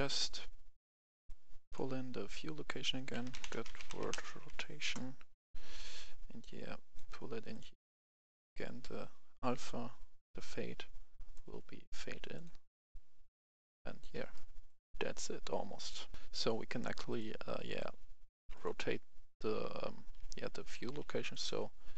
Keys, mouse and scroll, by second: 1.2 click, 3.2-4.3 typing, 4.8 Return, 5.9-14.1 drag, 14.2 right click, 15.7 click, 16.1 F10, 17.1 click, 19.3-21.4 right drag, 19.6-21.0 typing.